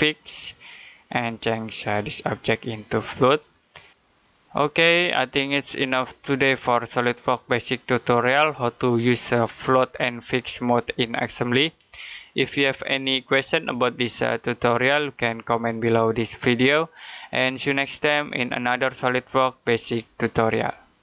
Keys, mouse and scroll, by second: 0.6 click, 1.6 right click, 3.2 click.